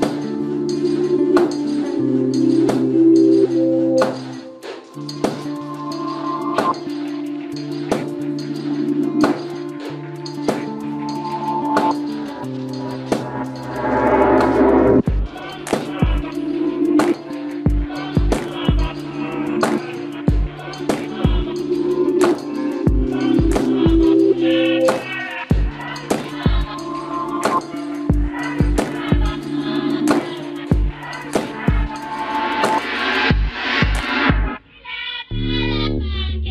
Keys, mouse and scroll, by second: 0.0 ctrl+r, 1.7 click, 4.4 ctrl+Tab, 6.9 KP_Decimal, 8.3 g, 9.9-11.7 right drag, 10.2 g, 11.7 g, 13.2 g, 14.3 g, 15.7 g, 18.1 g, 19.6 click, 20.6-22.2 right drag, 20.7 g, 22.2 middle click, 22.4 ctrl+Tab, 25.9 right click, 26.7 g, 28.9 ctrl+Tab, 30.2 click, 30.7 c, 34.7-36.5 middle drag, 35.7 c.